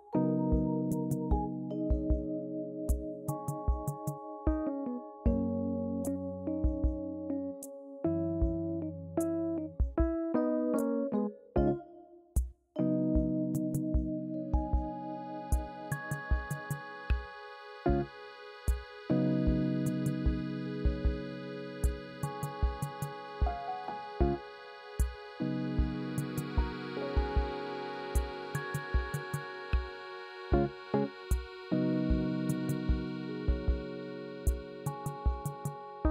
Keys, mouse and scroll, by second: 2.4 Tab, 3.4 click, 4.1 click, 4.7 alt+z, 5.2 click, 6.4-9.4 shift+drag, 12.2-14.0 drag, 14.3 Tab, 15.4 alt+click, 16.3 shift+click, 17.3 click, 20.0 click, 20.7-22.2 scroll up 2, 22.2 click, 23.3 alt+z, 23.5 click, 24.4 click, 25.7 Tab, 26.5 click, 27.2 click, 27.7 click, 28.2 alt+z, 28.7 click, 29.3 click, 30.5-33.0 drag.